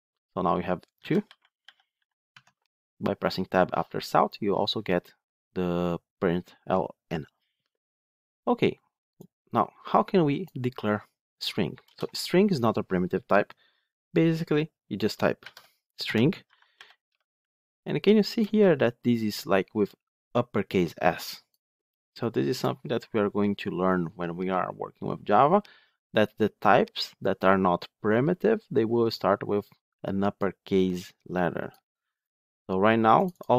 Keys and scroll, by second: 2.2 Tab.